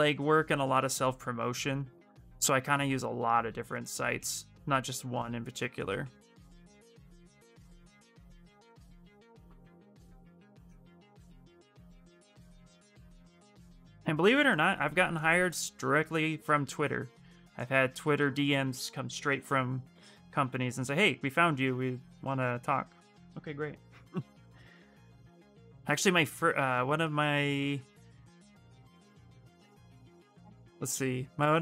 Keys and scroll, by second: 7.8 ctrl+z, 8.0 ctrl+z, 18.8 b, 19.2 s.